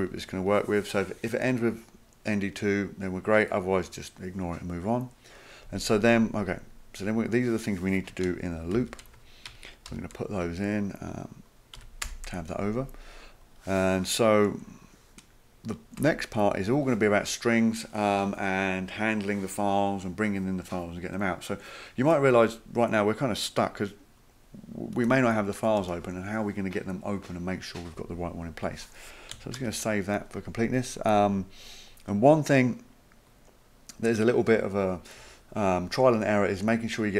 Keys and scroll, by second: 8.8 ctrl+c, 9.9 ctrl+v, 11.8 Tab, 12.0 Tab, 16.0 Return, 25.1 Delete, 25.8 BackSpace, 29.6 ctrl+s.